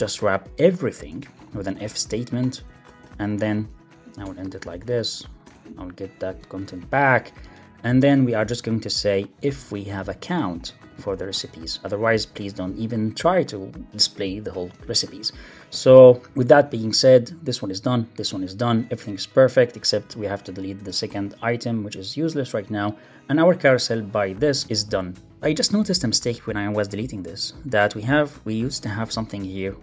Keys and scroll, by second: 0.0 alt+Up, 1.0 super+x, 3.6 Right, 3.9 Left, 4.1 Return, 4.9 shift+Tab, 5.1 Up, 5.3 Return, 5.4 super+v, 6.2 Down, 6.6 Up, 6.7 super+Left, 7.2 Left, 9.4 alt+Up, 9.9 super+c, 10.8 super+v, 11.1 super+s, 11.2 alt+super+l, 11.3 super+s, 12.2 super+Left, 12.5 alt+Up, 15.6 super+s, 19.8 super+Left, 20.0 alt+Up, 21.0 super+BackSpace, 21.2 super+s, 26.0 super+z, 28.8 alt+shift+Right.